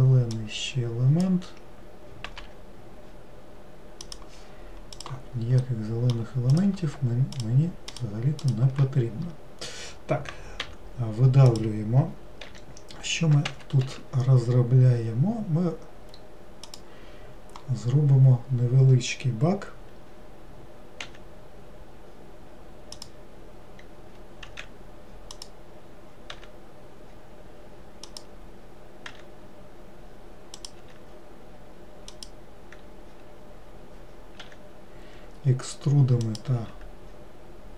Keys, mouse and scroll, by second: 0.5 click, 5.0 click, 5.7 middle click, 6.6 click, 7.5 shift+click, 8.0 shift+click, 8.5 shift+click, 10.7 e.